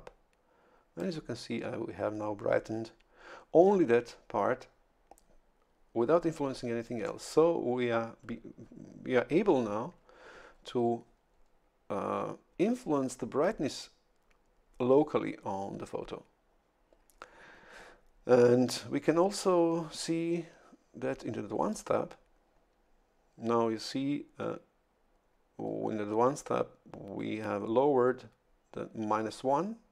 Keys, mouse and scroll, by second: 21.7 click.